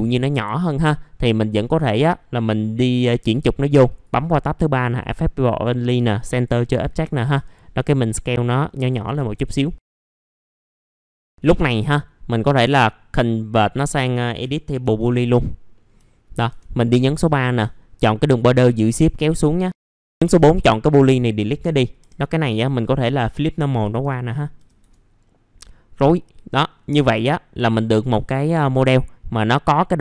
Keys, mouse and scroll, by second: 2.9 click, 6.8-7.3 scroll up 1, 7.9 click, 9.0 typing, 9.6 middle click, 10.2 click, 10.9 click, 11.4-14.4 drag, 15.7 middle click, 15.8 scroll down 1, 16.1 alt+middle click, 16.8 click, 18.3 shift+click, 19.7 shift+4, 19.8 click, 20.8 Delete, 22.1 click, 22.5 right click, 23.5 click, 25.2-26.0 scroll down 1, 26.0-28.1 drag, 28.1 1, 28.5 click.